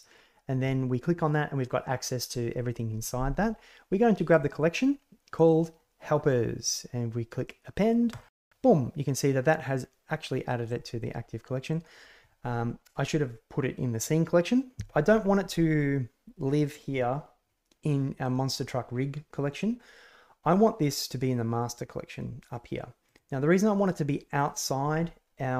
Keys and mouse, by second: 11.5 click, 16.5 click, 20.4-22.1 drag, 23.0 click.